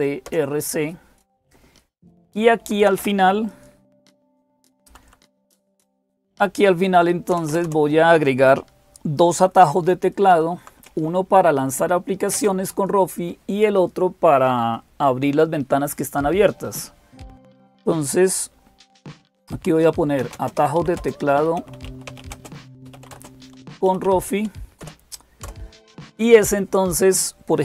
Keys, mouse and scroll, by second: 0.0-27.6 typing, 0.1 Return, 2.2 Down, 2.5 Down, 2.6 Down, 2.8 Down, 4.0 Page_Down, 12.2 Return.